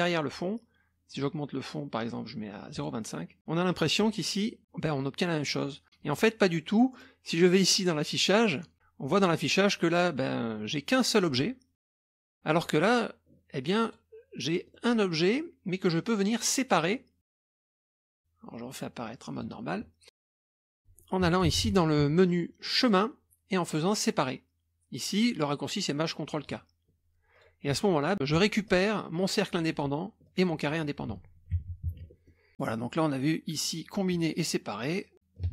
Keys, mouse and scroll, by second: 1.1 right click, 2.7 click, 3.4 click, 3.8 click, 4.6 click, 5.5 click, 6.9 click, 8.7 click, 9.2 click, 11.8 click, 12.1 click, 12.8 click, 13.8 click, 14.5 scroll up 1, 14.7 middle click, 17.7 click, 19.3 click, 20.4 middle click, 21.5 KP_Subtract, 21.6 KP_Subtract, 22.8 click, 26.4 click, 27.3 click, 28.7-30.1 drag, 30.2 click, 31.6 ctrl+z, 31.9 ctrl+z, 32.2 middle click, 35.1-35.5 drag, 35.4 space.